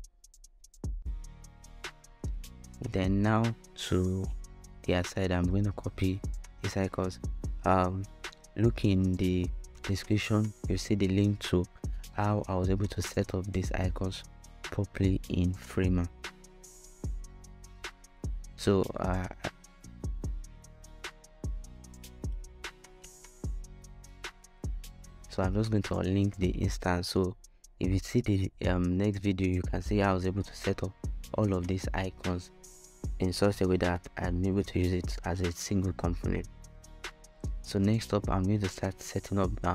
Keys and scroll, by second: 9.5 shift+i, 18.7 super+v, 21.6 super+v, 35.6-39.7 typing.